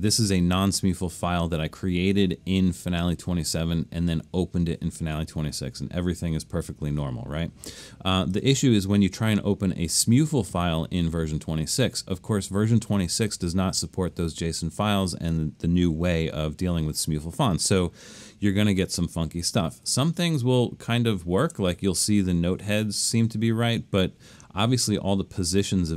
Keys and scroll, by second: 19.9 super+=, 20.5 super+=, 21.0 super+=.